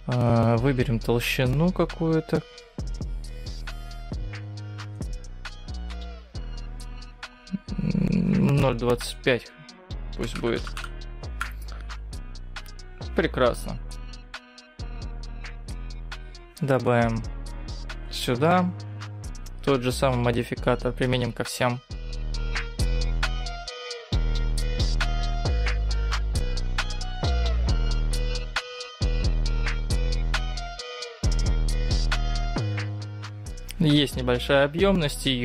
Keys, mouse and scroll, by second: 7.7 click, 9.2 click, 16.6 click, 19.9 click, 23.9 click, 24.4 click, 26.4 click, 28.7 click, 29.6 click, 29.7 click, 30.9 click, 31.9 scroll up 4, 32.8 KP_0, 34.9 click.